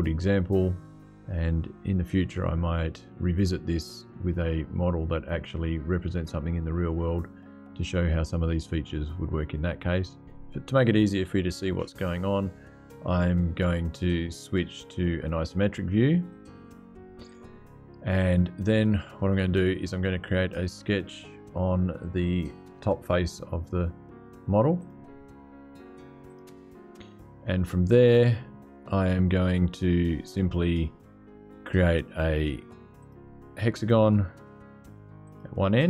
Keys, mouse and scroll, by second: 16.0 click, 17.0 click, 24.1 middle click, 24.5 click, 26.0 click, 32.7 click, 33.0-35.0 middle drag, 35.0 click.